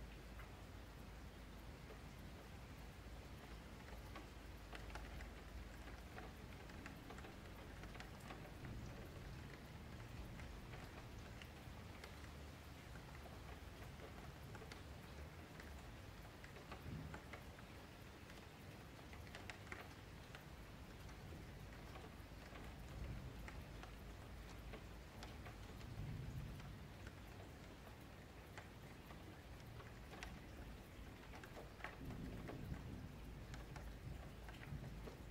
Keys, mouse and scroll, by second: 0.8 1, 1.0-2.3 middle drag, 2.3 click, 2.6-7.0 middle drag, 7.0 click, 8.4 shift+Tab, 9.1 click, 11.3 shift+click, 12.2 click, 12.8 shift+click, 13.6 click, 14.7 shift+click, 15.6 click, 17.2 shift+click, 17.9 ctrl+KP_5, 18.1 ctrl+KP_8, 18.9-20.0 middle drag, 20.0 KP_Enter, 20.5 KP_Decimal, 21.0-21.5 scroll down 14, 21.5 scroll up 1, 21.6-22.7 middle drag, 22.7 scroll up 4, 22.9 middle click, 23.4-23.8 scroll up 4, 23.8-26.6 middle drag, 26.6 s, 28.6-30.8 middle drag, 30.8 click, 33.1 click, 34.4 scroll up 3, 34.6-35.3 middle drag.